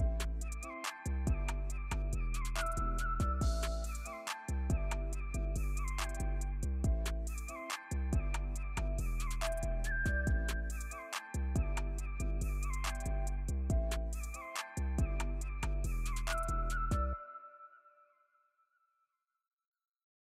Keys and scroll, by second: 2.0 alt+super+z, 9.3 alt+super+z.